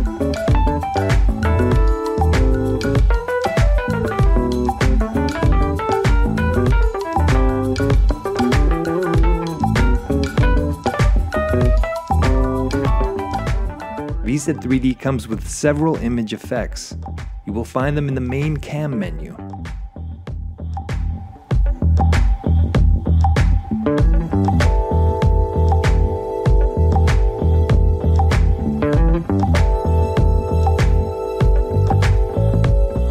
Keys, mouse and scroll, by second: 1.2 click, 2.7 click, 4.0 click, 5.1 click, 6.5 click, 7.2 click, 8.8 click, 10.1 click, 11.2 click, 18.1 shift+right click, 19.8 right click, 21.9 click, 23.6 click, 25.9 click, 28.0 click, 29.7 click.